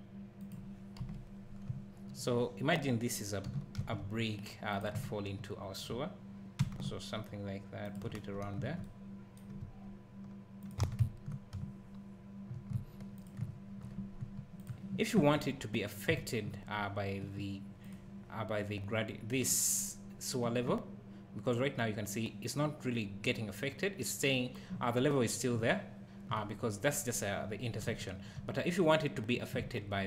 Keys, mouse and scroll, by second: 0.5 click, 1.0 KP_Decimal, 1.7 `, 3.5 g, 4.8 click, 5.0 `, 6.6 r, 7.9 click, 9.6 s, 10.7 click, 10.8 alt+a, 11.0 `, 13.2 click, 13.4 `, 14.6 click, 17.8 click, 25.6 `, 28.1 `.